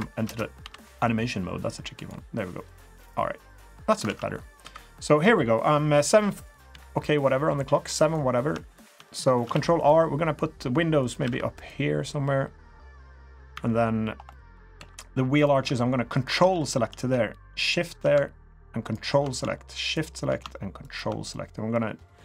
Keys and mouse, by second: 0.2 space, 0.6 b, 2.6 click, 4.1 alt+z, 4.3 middle drag, 4.6 3, 5.1 click, 6.7 KP_3, 7.2-8.0 middle drag, 8.0 click, 8.1 middle drag, 8.7 shift+middle drag, 9.5 ctrl+r, 11.2 ctrl+r, 13.2 middle click, 13.5 3, 14.3 drag, 14.8 2, 16.6 shift+middle drag, 17.6 shift+click, 18.8 ctrl+click, 20.8 ctrl+click, 21.3-21.7 middle drag.